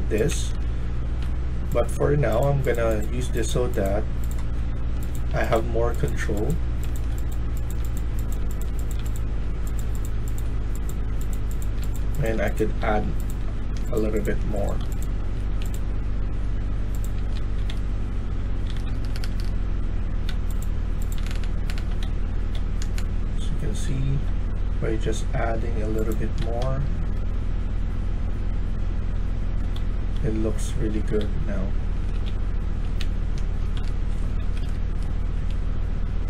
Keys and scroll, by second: 0.0-1.8 typing, 4.2-5.9 typing, 9.3-10.1 typing, 11.5-12.3 typing, 13.6 typing, 15.1 typing, 16.9-19.7 typing, 21.1-23.8 typing, 26.1-26.8 typing, 29.1-31.1 typing, 32.2-34.1 typing, 34.3 Escape, 34.5 Escape.